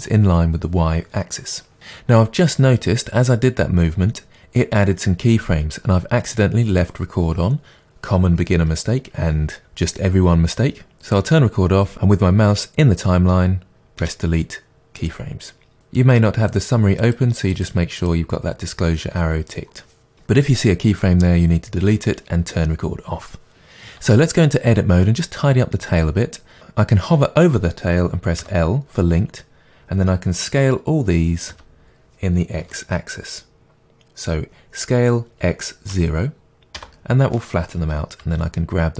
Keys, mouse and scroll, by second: 11.1 click, 14.0 Delete, 15.8 click, 16.5 click, 17.5 click, 18.0 click, 24.0 Tab, 26.6 click, 28.4 l, 36.8 Return, 38.2 g.